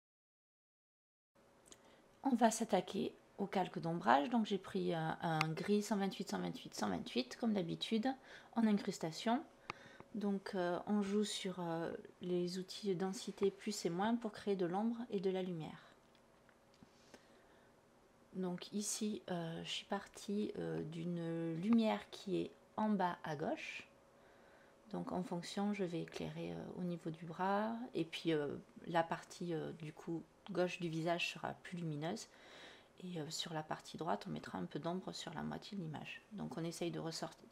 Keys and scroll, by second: 0.0-0.8 typing, 2.1-3.1 typing, 4.4 alt+BackSpace, 16.4 /, 19.8 /, 35.0 □.